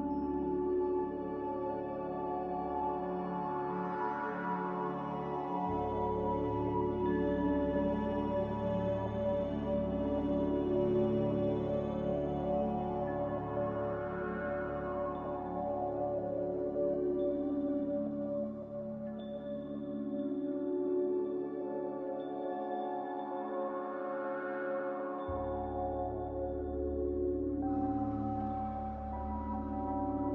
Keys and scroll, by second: 0.0 b, 4.8 typing, 5.6 Return, 8.1 typing, 8.4 Return, 15.1-19.9 typing, 16.9 Return, 26.3-27.2 typing.